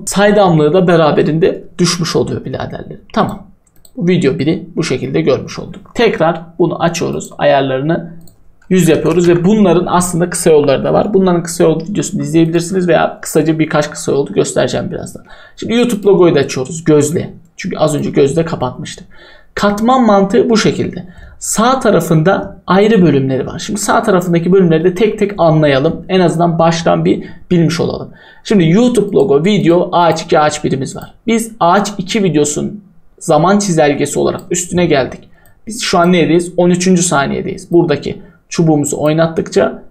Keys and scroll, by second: 8.5-9.6 typing.